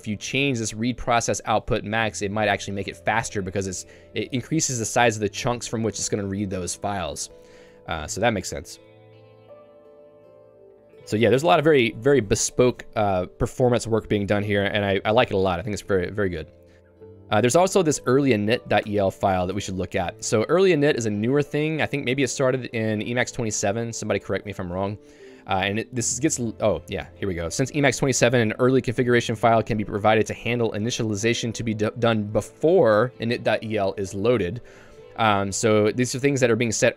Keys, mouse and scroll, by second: 7.3 Escape, 8.0 j, 10.7 j, 11.1 k, 17.8 super+e, 18.5 k, 19.0 Return, 19.5 Escape, 20.1 j, 27.0 k, 28.5-29.6 typing, 34.5 Escape, 35.5 j.